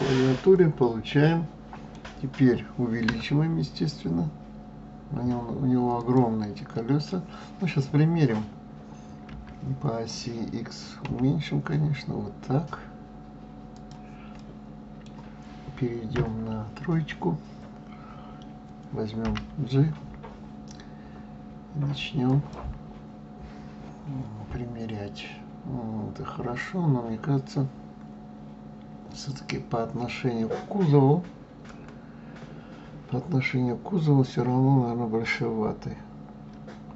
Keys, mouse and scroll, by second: 0.4-3.1 middle drag, 3.1 s, 6.5-9.3 middle drag, 9.3 s, 14.4-16.1 middle drag, 16.1 KP_3.